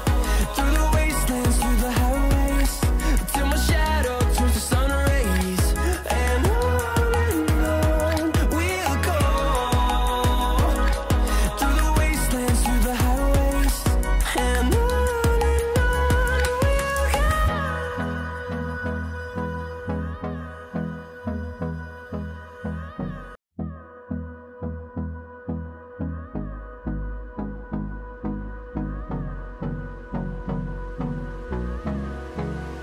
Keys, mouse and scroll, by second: 1.7-8.5 drag, 10.4 ctrl+z, 10.8-14.8 drag, 14.8-20.1 drag, 20.1-21.0 scroll up 1, 22.5 click, 22.5 F10, 24.8-32.8 drag, 26.9 typing.